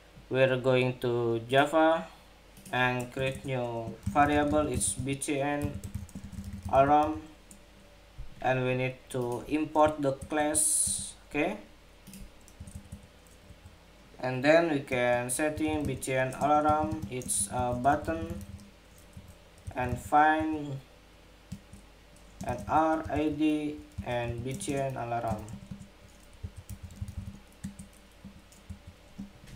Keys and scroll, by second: 9.9 alt+Return.